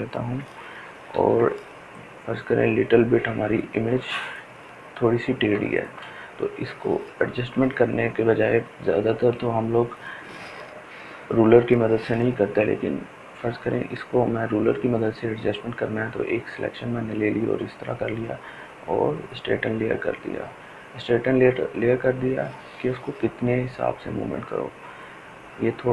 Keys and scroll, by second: 0.7 ctrl+t, 5.1 ctrl+space.